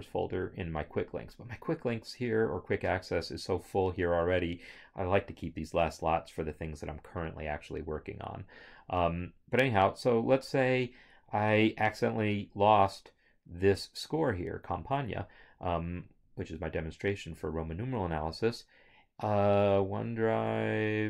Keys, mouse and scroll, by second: 14.8 click, 14.8 right click.